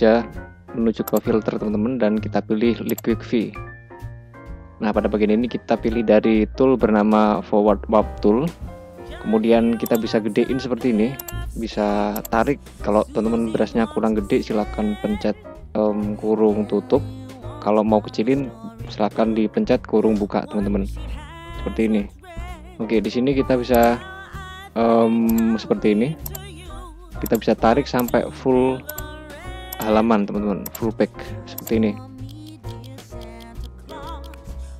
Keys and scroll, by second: 14.2 ], 18.4 [, 20.7 ], 22.0 [.